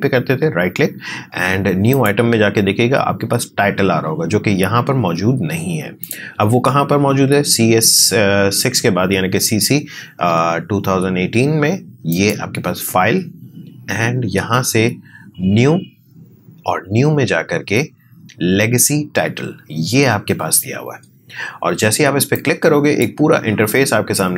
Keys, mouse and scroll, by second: 1.9 click, 6.0 click, 12.1 click, 22.3-24.3 drag.